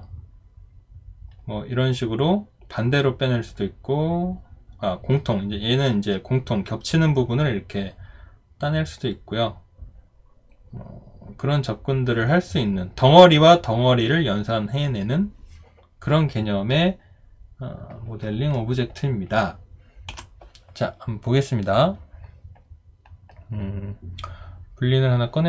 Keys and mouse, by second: 20.1 Delete.